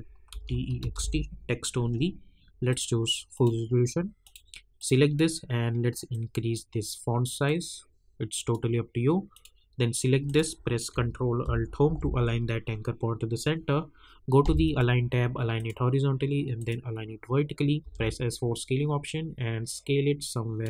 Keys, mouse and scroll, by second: 0.0-1.4 typing, 2.7-9.3 drag, 11.8 ctrl+alt+Home, 14.6 click, 17.8 s, 18.3-20.6 drag.